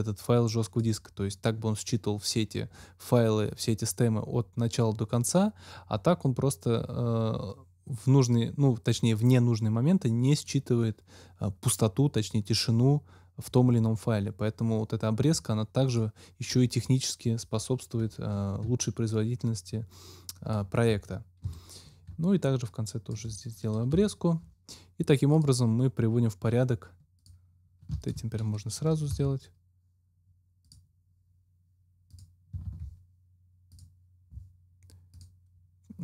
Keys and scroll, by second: 21.4 super+Delete, 22.0 super+Delete, 23.8 super+Delete, 29.0 ctrl+shift+x, 32.6 ctrl+x.